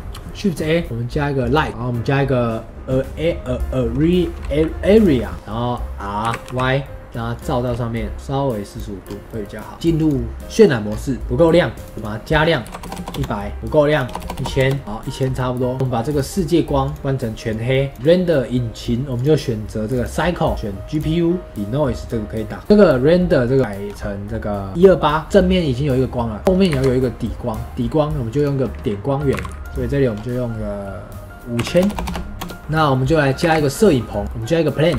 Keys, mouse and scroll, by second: 5.3-6.1 middle drag, 6.1 r, 7.5-8.1 middle drag, 8.1 g, 9.0 scroll down 1, 9.2-9.9 middle drag, 9.9 click, 10.4-10.8 middle drag, 10.8-11.7 scroll up 2, 11.7-12.8 drag, 12.8 KP_0, 13.8 click, 14.1 KP_0, 14.2 KP_0, 15.0 click, 15.2-16.0 middle drag, 16.0-17.0 drag, 17.9 click, 19.0-22.1 drag, 23.4-25.2 drag, 25.2 scroll down 1, 25.3-26.3 middle drag, 26.3 click, 26.4 shift+a, 26.6 shift+a, 27.7 shift+a, 28.7-29.2 middle drag, 29.2 g, 29.6-31.8 drag, 31.8 KP_0, 31.9 KP_0, 32.6 click, 32.8-33.3 middle drag, 33.3 shift+a, 34.2-34.8 middle drag, 34.8 g.